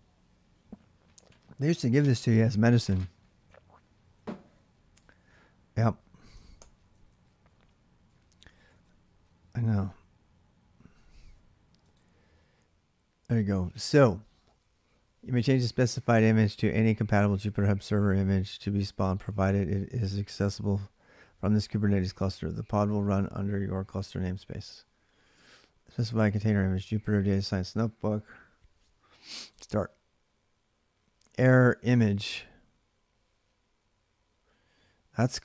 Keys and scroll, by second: 6.3 ctrl+c, 6.8 ctrl+a, 7.0 ctrl+a, 9.4 ctrl+a, 9.4 alt+Tab.